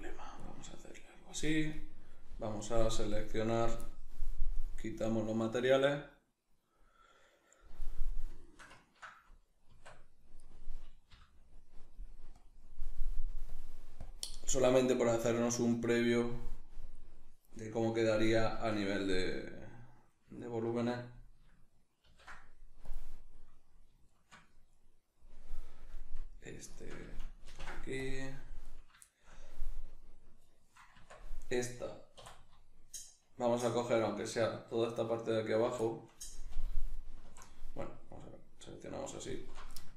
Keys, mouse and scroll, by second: 1.7 right click, 2.5 click, 3.1 right click, 4.9 click, 8.1-10.4 middle drag, 9.7 Tab, 10.4 right click, 11.1 l, 12.4 click, 18.5 Tab, 19.4 right click, 20.4 shift+right click, 22.1 ctrl+l, 23.3-24.7 middle drag, 24.7 right click, 26.7 shift+right click, 27.5 ctrl+l, 28.7 right click, 29.1-32.2 shift+middle drag, 30.9 Tab, 32.2 3, 34.3 alt+right click, 35.9-36.9 shift+middle drag, 36.9 alt+shift+right click, 38.1 alt+right click, 39.3 alt+shift+right click.